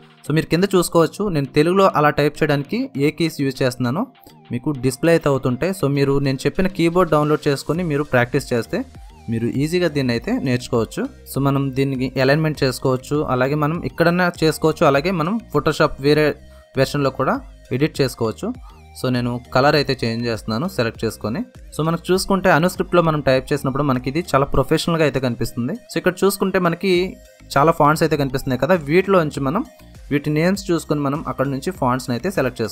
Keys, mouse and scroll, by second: 0.0-3.8 typing, 4.9 Return, 4.9 typing, 6.0-11.3 typing, 11.0 click, 11.3 Return, 12.0 click, 12.6 ctrl+a, 13.6-32.7 drag, 21.0 typing.